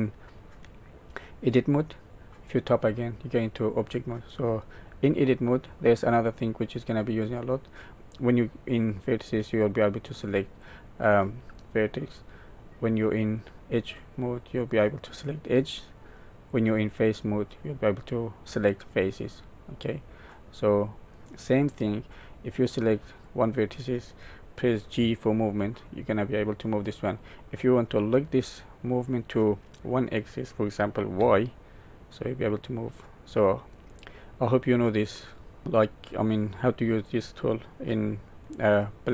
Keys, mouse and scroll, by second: 0.6 middle click, 2.8 Tab, 4.3 Tab, 7.9 click, 8.7 click, 10.6 click, 12.9 click, 14.7 click, 16.5 click, 17.5 click, 21.5 click, 23.2 click, 24.9 g.